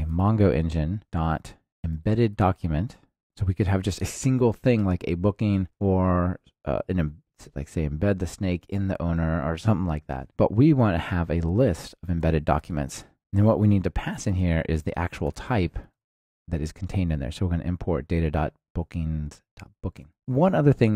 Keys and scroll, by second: 0.4 Return, 12.2 Return, 15.9 alt+Return.